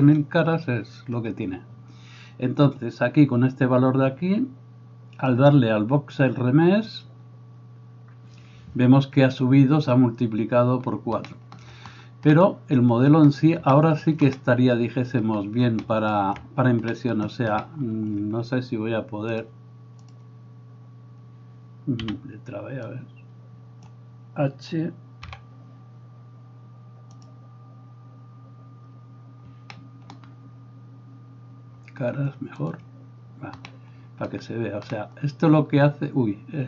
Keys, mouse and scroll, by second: 22.1 b, 25.6 h.